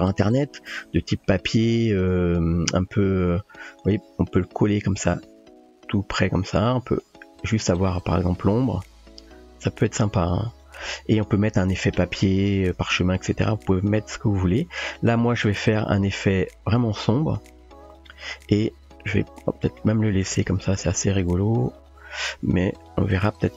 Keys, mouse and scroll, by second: 0.1 typing, 1.3-1.6 drag, 1.9 g, 5.1 g, 8.7 g, 15.4 click, 21.8 click, 22.7 click.